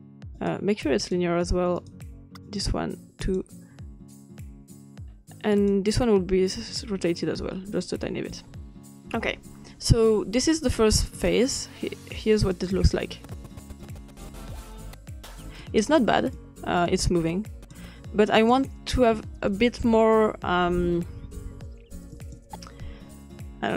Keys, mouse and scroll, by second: 0.4 click, 1.0 click, 1.8 click, 2.5 click, 3.3 click, 5.5 click, 7.0-7.6 scroll up 2, 7.6-8.8 scroll up 1, 11.1 click, 12.5 click, 15.5 click, 16.3-17.8 drag, 18.4 click, 22.1 click.